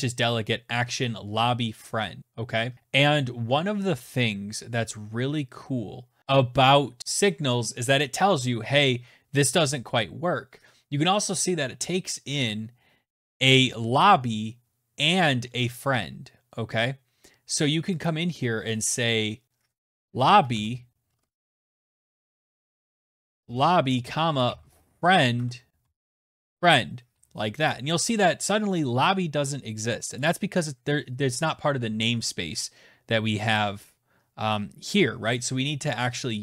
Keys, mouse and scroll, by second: 16.9 click, 18.6-25.7 typing, 24.2 Tab, 26.5 click, 29.1 click.